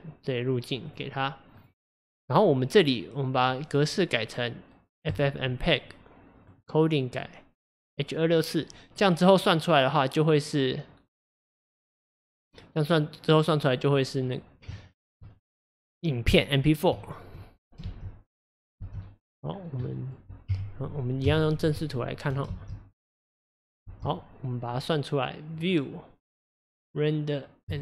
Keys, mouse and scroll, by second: 5.2-14.8 drag, 14.8 shift+middle click, 15.2-15.7 scroll up 1, 16.6-17.0 scroll up 1, 17.0-17.8 shift+middle drag, 17.8 space, 18.9 space, 19.1 middle click, 19.4-19.8 scroll down 2, 19.8 middle click, 20.5 KP_0, 21.2 KP_1, 22.0 shift+middle click, 22.5 space, 23.9 space.